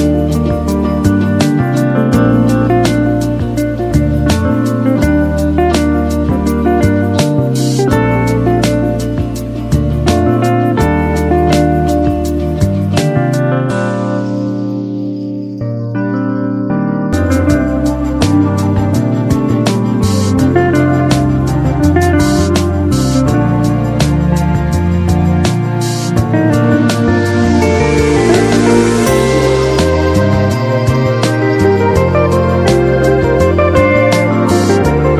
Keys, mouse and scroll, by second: 0.5-4.0 drag, 2.2-3.1 drag, 6.4 click.